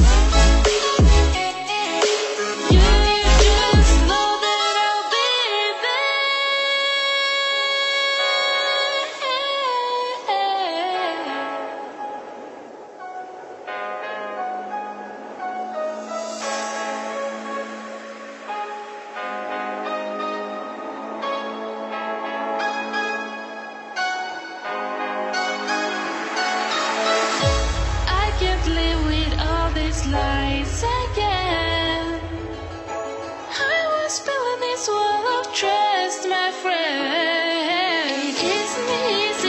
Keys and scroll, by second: 9.7 ctrl+c, 10.0 ctrl+v.